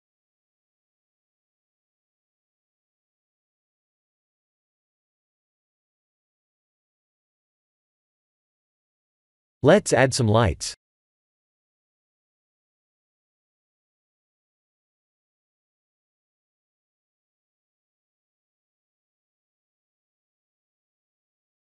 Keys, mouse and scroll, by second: 1.0 click, 10.4 click, 11.0 click, 11.6 shift+a, 19.3 middle click, 21.1 click.